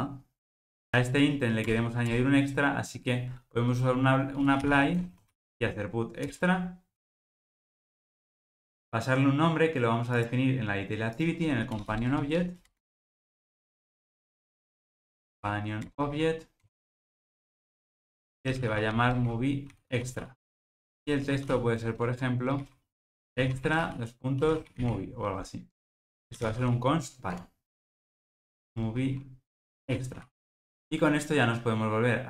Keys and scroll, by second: 1.7 Return, 6.3 Return, 15.8 Return, 17.4 alt+super+l, 27.4 Tab, 31.1 alt+super+[.